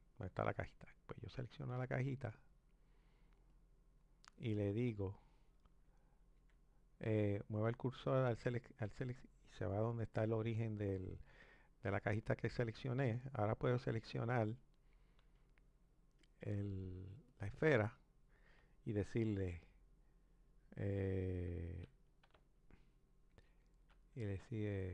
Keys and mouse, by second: 1.9-3.7 drag, 5.6 shift+s, 6.4 shift+s, 17.3 click, 19.3 shift+s, 23.3 shift+s, 24.8 ctrl+s.